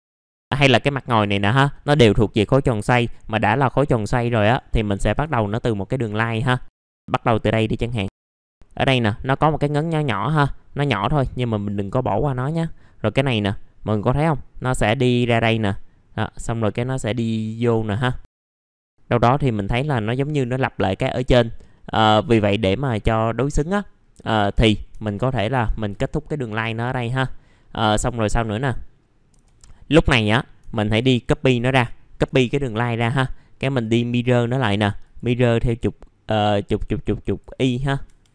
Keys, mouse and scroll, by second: 0.0 scroll up 1, 4.3 ctrl+right click, 5.1 click, 7.7 scroll up 1, 8.7 shift+click, 10.8 shift+click, 11.6 shift+click, 14.8 click, 16.6 scroll down 1, 17.5-18.0 scroll up 1, 18.3 click, 21.7 middle click, 22.3 scroll down 1, 23.5 right click, 24.0 scroll up 1, 24.3 1, 25.1 click, 25.6 middle click, 25.9 Delete, 27.9-28.4 scroll up 1, 28.4-28.8 scroll down 1, 31.0 shift+click, 37.8 middle click, 38.0 F3.